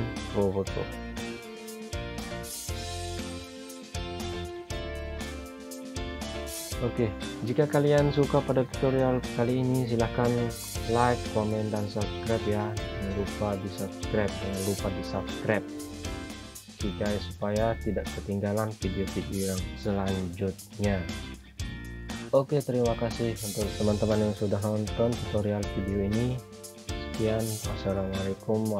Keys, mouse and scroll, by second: 1.1 shift+click, 2.2 c, 3.1 click, 12.0 click, 14.7 shift+click, 15.2 c, 15.6 click, 16.8-17.4 scroll down 1, 18.4 click, 22.1 Caps_Lock, 22.1-22.8 scroll down 1, 22.8 click, 23.6 F4, 24.4 F9.